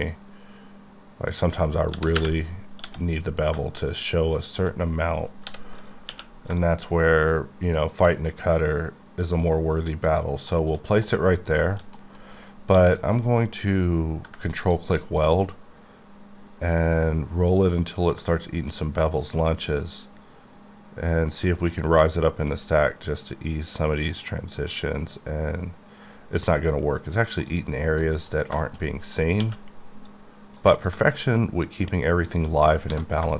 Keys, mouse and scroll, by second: 1.4 shift+click, 1.7 scroll up 2, 1.9-2.9 typing, 4.5 shift+click, 5.5 h, 5.8 click, 6.1 q, 6.5 click, 6.7 shift+click, 10.1 shift+click, 10.6 shift+middle click, 10.8 scroll, 10.9 scroll down 2, 11.1 middle click, 11.6 middle click, 12.0 double middle click, 12.3 scroll, 12.4-12.8 scroll up 1, 12.8 q, 13.3 q, 14.7 ctrl+click, 17.2-17.6 scroll up 2, 20.0 scroll up 1, 22.7-23.8 scroll up 2, 24.0-24.8 scroll up 2, 25.2-26.4 scroll down 4, 26.4 scroll up 1, 27.4 click, 27.8-28.6 scroll down 4, 28.1 middle click, 28.6 shift+middle click, 28.9 shift+scroll, 29.0-29.3 scroll up 3, 29.4 q, 30.1 click, 30.9 click, 32.3 shift+click, 32.7 scroll down 6, 32.9 a.